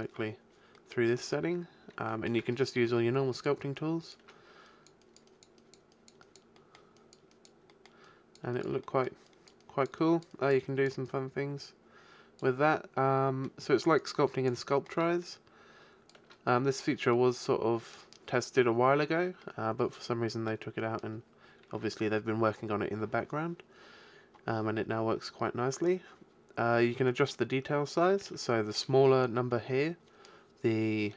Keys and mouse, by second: 2.5 click, 10.5-12.9 drag, 12.9-14.0 middle drag, 14.0-16.9 drag, 16.9-21.3 middle drag, 28.4-30.4 middle drag.